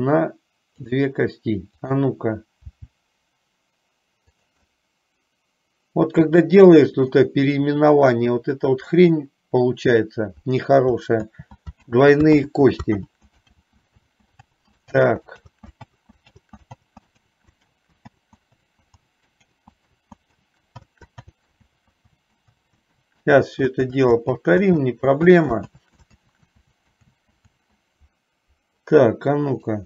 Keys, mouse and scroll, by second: 1.0 click, 1.9 click, 2.8 g, 5.0-7.4 middle drag, 11.4 ctrl+z, 12.0 ctrl+z, 12.6 ctrl+z, 13.3 ctrl+z, 13.6 ctrl+z, 14.3 ctrl+z, 14.9 ctrl+z, 15.3 ctrl+z, 15.6 ctrl+z, 16.6 ctrl+z, 17.9 ctrl+z, 18.5 ctrl+z, 18.9 ctrl+z, 19.3 ctrl+z, 19.8 ctrl+z, 21.1 ctrl+z, 22.4 ctrl+z, 22.8 ctrl+z, 23.3 ctrl+z, 23.5 ctrl+z, 24.3 ctrl+z, 24.6 ctrl+z, 25.0 ctrl+z, 25.5 ctrl+z, 25.9 ctrl+z, 27.1 ctrl+z.